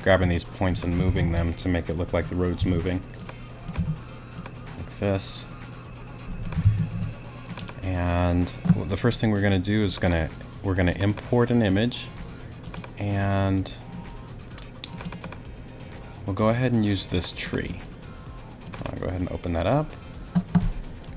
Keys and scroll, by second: 1.1 shift+super+z, 1.8 super+z, 2.6 g, 3.8 t, 6.6 super+z.